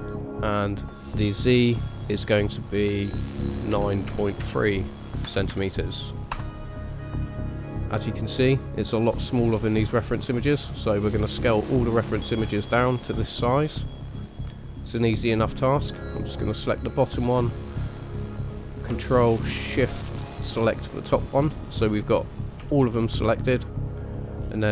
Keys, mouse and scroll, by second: 0.3 click, 7.2-10.1 scroll up 4, 10.1 click, 10.1-10.6 scroll up 1, 10.7-12.0 scroll down 4, 12.0-12.9 scroll up 2, 12.9 scroll down 2, 13.7-14.2 scroll down 2, 14.7 click, 16.6 click, 20.3 ctrl+shift+click, 21.4-21.9 scroll up 1, 21.9-22.6 scroll down 1, 22.6-23.3 scroll down 1, 22.6 s, 24.4-24.7 scroll up 1.